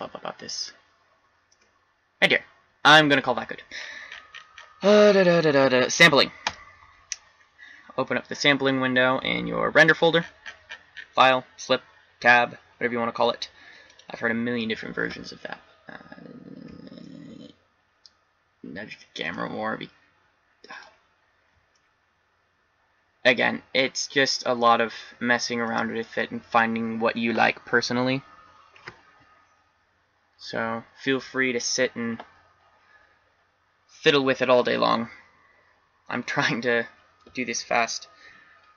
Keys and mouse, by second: 6.8-8.3 drag, 8.4-12.7 drag, 22.0-23.7 middle drag.